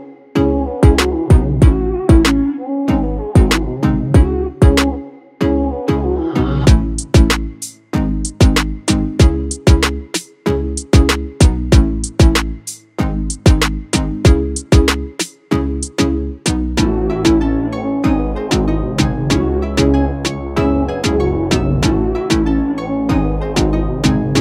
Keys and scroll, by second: 11.6-12.6 typing, 22.8-23.7 typing.